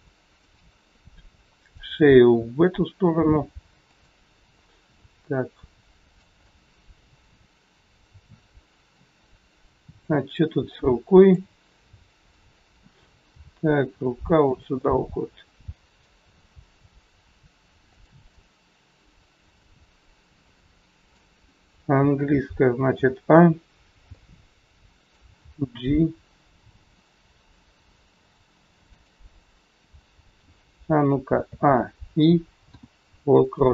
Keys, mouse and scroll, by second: 1.6 click, 2.3 r, 4.6 middle click, 6.3 middle click, 9.9 click, 11.1 click, 12.0 middle click, 13.4 g, 14.7 middle click, 16.4 g, 18.2 middle click, 23.4 a, 23.7-24.1 scroll down 1, 24.1 middle click, 25.4 g, 31.3 a, 33.0 i.